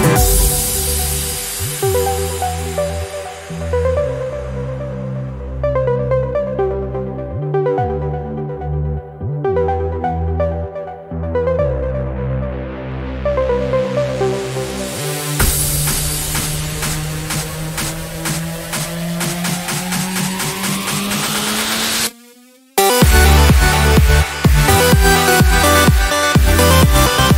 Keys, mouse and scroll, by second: 1.4 ctrl+shift+9, 4.3 ctrl+shift+click, 7.8 click, 9.8 click, 11.2 click, 13.6 ctrl+z, 16.4 click, 17.7-19.2 drag, 20.7 click, 21.9 ctrl+z, 23.4 ctrl+click, 26.3 click.